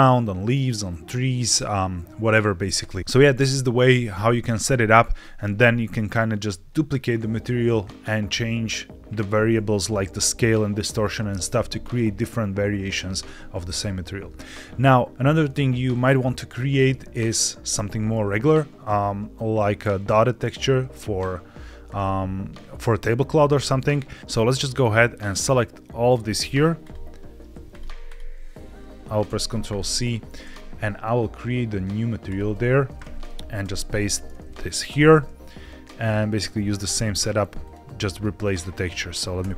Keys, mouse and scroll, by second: 14.7 shift+middle click, 15.1-15.7 scroll down 4, 24.7-26.1 drag, 26.7 shift+click, 28.0 shift+click, 29.2 ctrl+c, 29.9 click, 32.2 click, 33.5 ctrl+v, 34.8 g, 36.9 click, 37.5 click, 38.5 middle click, 39.3 x.